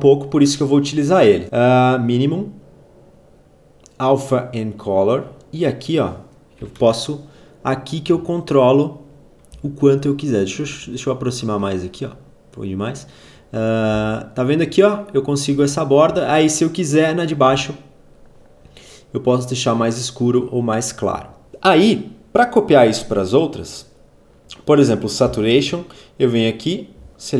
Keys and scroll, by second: 6.5 3, 6.6 Return, 9.3 z, 13.7 v, 25.3 ctrl+c.